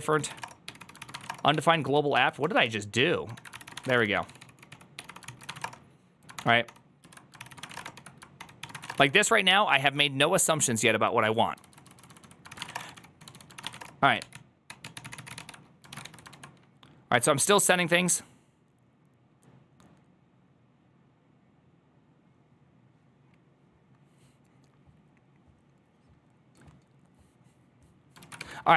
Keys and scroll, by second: 0.0-5.8 typing, 3.2 ctrl+r, 6.2 ctrl+d, 6.5 ctrl+d, 7.2 ctrl+u, 7.2 ctrl+c, 7.3-14.1 typing, 8.2 ctrl+d, 14.2 ctrl+t, 14.5 ctrl+h, 14.7 ctrl+t, 14.8 ctrl+h, 15.8 ctrl+a, 15.9 2, 16.2 ctrl+a.